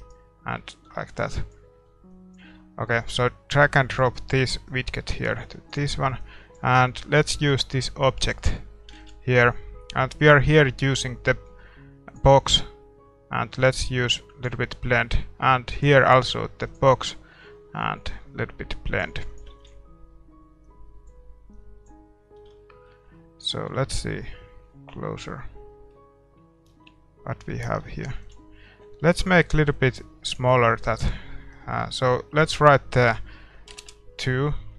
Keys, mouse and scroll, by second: 0.0-1.7 right drag, 0.5 ctrl+t, 1.4-9.3 drag, 1.7 x, 2.7 x, 8.7 middle click, 9.1 ctrl+s, 10.3-12.1 drag, 13.9-15.4 drag, 15.9-17.5 drag, 18.2-23.4 drag, 20.0 ctrl+s, 22.2-24.9 middle drag, 24.9-25.4 scroll up 1, 25.6 scroll down 1, 25.8-29.1 middle drag, 28.3 ctrl+s, 29.1-29.8 scroll up 1, 29.8-33.8 drag.